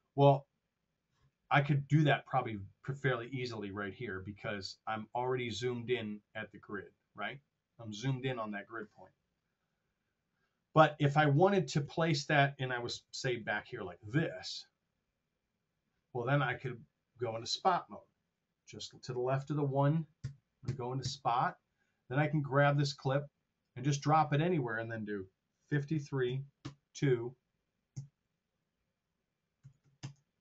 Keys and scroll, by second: 11.7 super+z, 12.8 r, 20.2 Home, 25.7 KP_5, 25.9 KP_3, 26.2 Right, 26.6 KP_2, 27.9 Right, 29.5 KP_2, 29.7 KP_5, 29.9 KP_0.